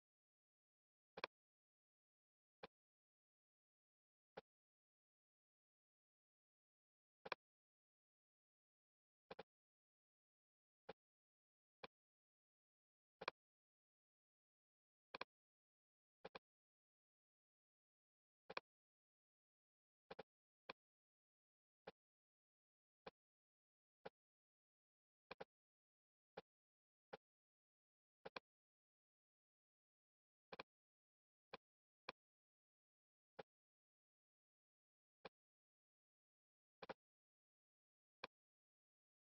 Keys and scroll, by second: 0.3 super+z, 22.1 super+z, 29.6 super+z.